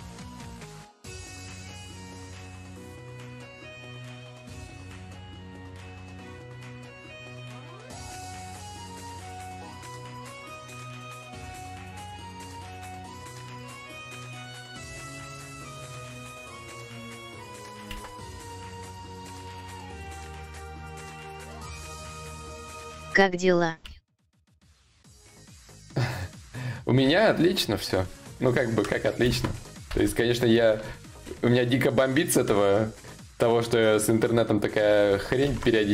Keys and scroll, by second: 17.5 ctrl+z, 17.5 y, 23.4 ctrl+z, 28.9 ctrl+z, 29.5 ctrl+z, 30.1 ctrl+z, 35.0 ctrl+z.